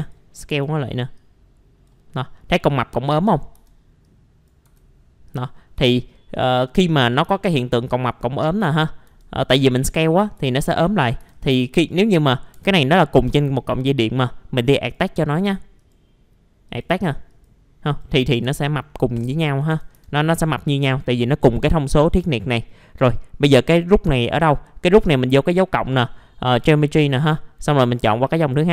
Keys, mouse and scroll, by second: 0.3 scroll up 1, 0.5 w, 1.2 click, 2.1 middle click, 2.1 scroll down 1, 3.3 scroll up 1, 3.5 r, 4.1 click, 5.3 click, 6.0 alt+middle click, 6.6 middle click, 7.1 click, 10.4 alt+middle click, 11.3 click, 12.8 middle click, 13.3 right click, 14.8 click, 15.8 right click, 16.7 click, 17.9 right click, 18.2 scroll up 1, 18.4 F4, 18.9 middle click, 18.9-19.2 scroll down 1, 19.3 alt+middle click, 23.1-23.8 scroll up 1, 24.3 middle click, 25.1 click.